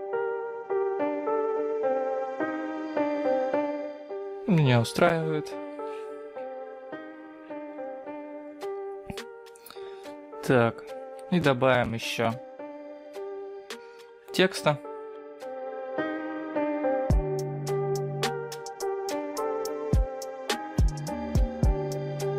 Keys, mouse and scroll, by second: 2.3 g, 11.0-11.7 scroll down 3, 11.7-12.8 scroll up 4, 16.1 click, 16.3 shift+a, 17.1 middle click, 17.6 middle click, 18.9 click, 20.2 g, 21.8 middle click.